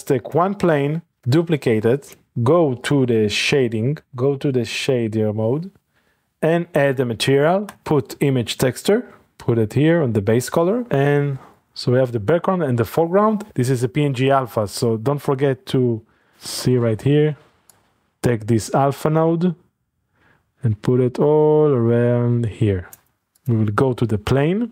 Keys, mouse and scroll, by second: 0.2 click, 0.8 middle click, 1.2 d, 2.0 click, 2.8 click, 3.3-3.8 drag, 4.0-4.8 drag, 5.1-6.8 drag, 7.7 click, 8.0-9.0 typing, 9.2 click, 11.6-12.9 drag, 12.9-13.3 middle drag, 14.5-14.9 scroll up 1, 14.8-16.2 middle drag, 16.3-17.0 shift+scroll up 3, 17.7-19.9 drag, 23.0 click, 23.2 click, 23.5-24.7 drag.